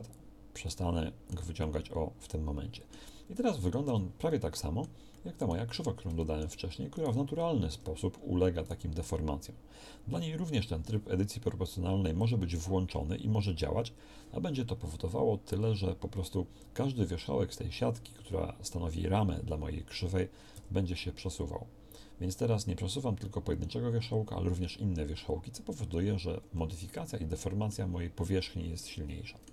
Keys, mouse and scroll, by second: 0.7 click, 0.8-3.9 middle drag, 3.9 Tab, 7.8 Tab, 20.6 g, 27.6-29.3 middle drag.